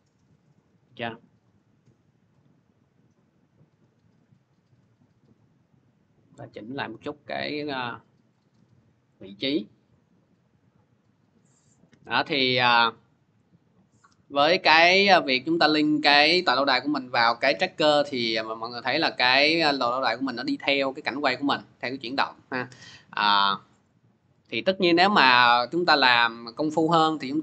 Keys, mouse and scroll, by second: 1.4 click, 3.4 click, 4.8 click, 8.1 click, 9.1 click, 9.4-9.8 scroll, 11.6 click, 23.2-27.4 drag.